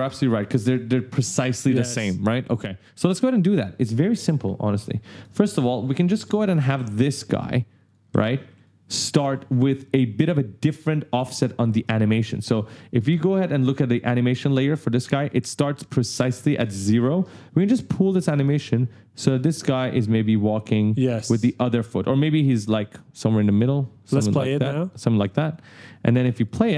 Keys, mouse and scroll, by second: 2.3 right click, 2.3 w, 4.9 click, 6.1-7.8 typing, 6.3 right click, 7.6 click, 7.9 right click, 11.1 click, 13.7 click, 15.2-15.9 ctrl+scroll up 1, 16.1 right click, 17.8 click, 25.3 click, 26.2 right click.